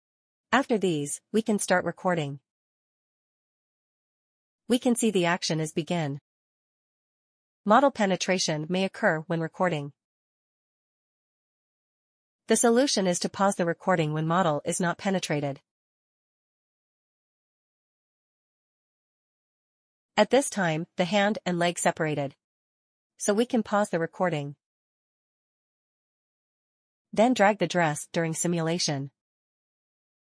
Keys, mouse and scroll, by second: 1.0 click, 9.0 middle click, 9.1 scroll down 1, 9.2 right click, 9.4 right click, 9.7 right click, 9.8 scroll down 1, 9.9 middle click, 9.9 middle click, 9.9 right click, 10.1 right click, 10.4 right click, 10.5 right click, 10.6 click, 11.3 shift+q, 11.7 click, 12.1 right click, 12.2 right click, 12.6 shift+c, 13.9 right click, 14.2 right click, 14.4 scroll down 1, 15.2 right click, 15.6 right click, 16.5 scroll down 1, 16.9 scroll up 2, 17.0 right click, 17.1 right click, 17.2 right click, 17.2 scroll down 1, 17.6 scroll up 1, 17.7 middle click, 17.9 right click, 17.9 right click, 18.0 right click, 18.1 right click, 18.1 scroll up 1, 18.6 right click, 19.1 right click, 23.3 click, 25.5 right click, 26.7 click, 27.1 scroll down 1, 27.3 right click, 27.4 right click, 27.5 click, 27.7 right click, 27.8 right click, 28.4 right click, 28.4 shift+q, 28.4 right click, 28.6 space, 28.6 click, 29.0 click, 30.2 click.